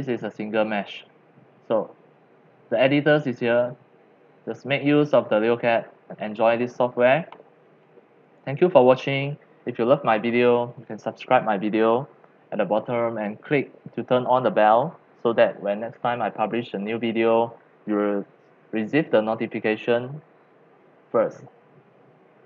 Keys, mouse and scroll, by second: 0.8 scroll, 1.8 click, 3.6-5.9 drag, 5.9 middle click, 5.9-6.3 scroll up 3, 6.3-6.9 scroll down 4, 6.9 scroll, 7.8 scroll, 8.7-13.4 drag.